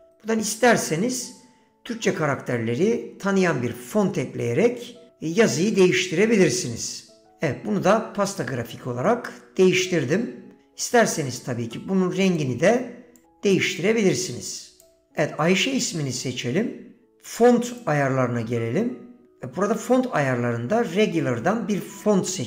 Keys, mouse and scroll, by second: 7.4 a, 7.4 f, 7.4 ", 7.4 k, 8.5 Tab, 12.4 click.